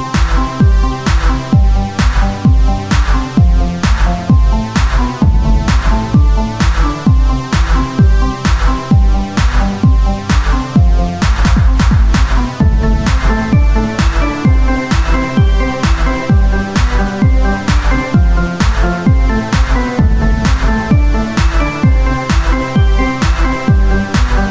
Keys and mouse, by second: 0.1 ctrl+Tab, 1.7-3.2 drag, 3.8 r, 4.5 z, 6.9 r, 9.5 r, 11.3 ctrl+z, 14.9 r, 16.5 z, 17.9 f, 18.4 ctrl+z, 19.2 w, 21.3 ctrl+z, 23.3 ctrl+Tab.